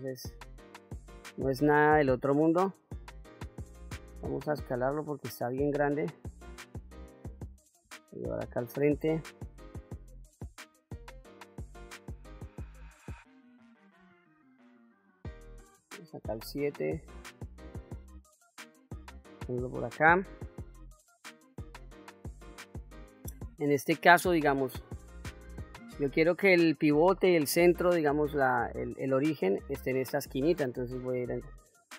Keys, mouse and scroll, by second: 0.4 KP_1, 1.3-1.7 scroll up 1, 1.9 shift+middle click, 4.0 s, 5.7 click, 7.8 g, 9.0 click, 10.0 KP_1, 10.8 scroll up 2, 11.6 scroll down 1, 12.5-13.3 shift+middle drag, 14.0 s, 15.5 click, 16.2 KP_7, 17.6 g, 19.7 click, 24.9-25.8 middle drag, 31.2 Tab.